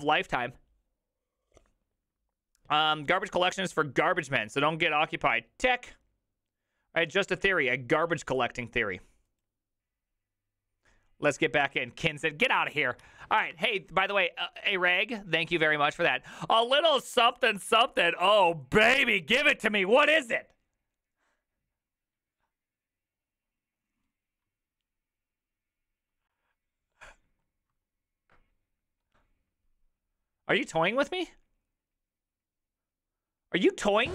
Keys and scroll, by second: 13.5 alt+{.